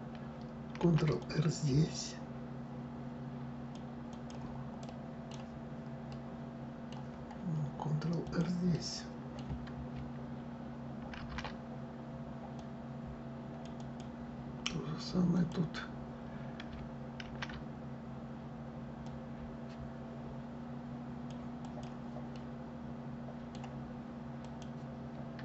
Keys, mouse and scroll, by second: 0.5 ctrl+r, 4.5-5.8 right drag, 5.8-7.9 middle drag, 7.9 click, 8.4-10.8 middle drag, 10.8 ctrl+r, 15.0 click, 16.9 ctrl+r, 22.0-24.1 middle drag, 24.1 click.